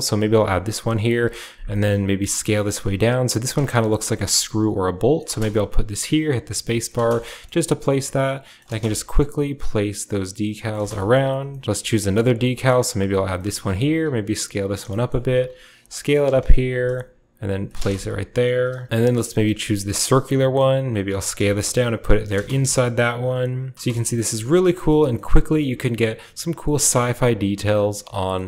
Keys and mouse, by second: 0.0-11.6 middle drag, 0.9 KP_7, 12.7-18.8 middle drag, 19.1-28.4 shift+middle drag.